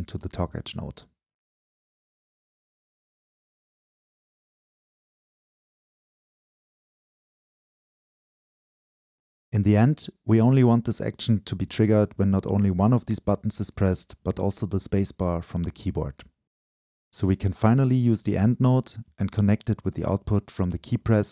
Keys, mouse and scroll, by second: 5.3-6.0 scroll up 2, 6.0-7.5 scroll up 1, 7.5 click, 8.1 right click, 8.8 click, 9.3 right click, 9.9 click, 10.3 right click, 10.5 click, 10.7 right click, 11.1 click, 11.6 right click, 11.9 click, 12.4 right click, 13.5 click, 14.1-16.2 right drag, 16.6 click, 16.7 click, 19.3-21.3 drag.